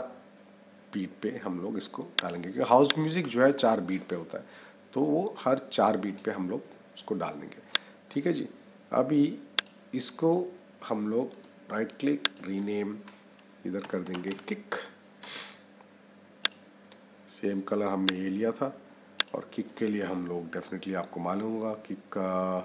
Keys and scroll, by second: 13.7 k.